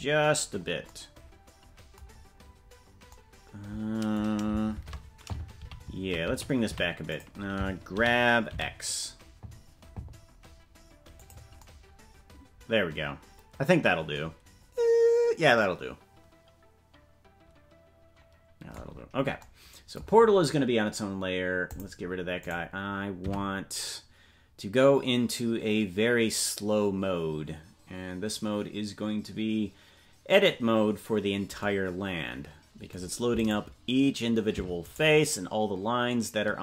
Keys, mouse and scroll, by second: 0.3-0.8 scroll up 1, 2.1-2.7 scroll up 2, 2.7-3.1 scroll up 3, 4.7 shift+`, 7.9 g, 18.8-19.5 scroll down 7, 21.6 click, 22.5 right click, 34.0-36.6 right drag.